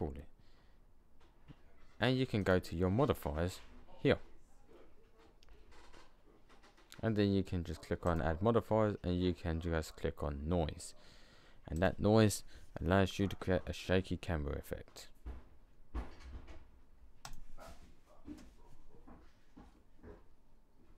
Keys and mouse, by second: 4.7-7.9 middle drag.